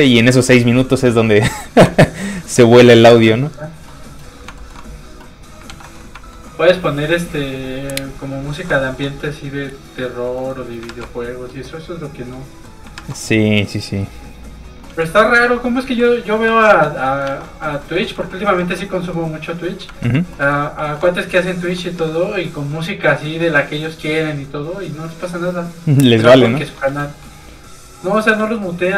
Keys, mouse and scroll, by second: 4.0 click, 4.5 shift+middle click, 5.5 ctrl+middle click, 5.6 ctrl+s, 6.0 middle click, 6.1 shift+middle click, 6.4-7.3 shift+scroll down 2, 7.3 click, 8.9 1, 9.3 click, 10.3 middle click, 10.8 shift+a, 11.4 middle click, 11.5 middle click, 12.0 click, 12.3 middle click, 12.9 shift+a, 14.2 click, 14.3 click, 14.6 scroll down 1, 14.8 s, 15.5 click, 15.9 s, 16.2 click, 16.5 middle click, 16.9 alt+shift+z, 17.0 middle click, 17.6 shift+middle click, 17.9 shift+middle click, 18.2 shift+middle click, 18.5 alt+shift+z, 18.5 shift+middle click, 19.1 middle click, 19.1 shift+click, 19.8 ctrl+Tab, 20.4 shift+middle click, 20.9 shift+middle click, 21.2 shift+middle click, 21.3 alt+shift+middle click, 21.9 alt+shift+a, 22.7 middle click, 26.2 ctrl+Tab, 26.8 Tab, 26.9 space, 28.6 middle click.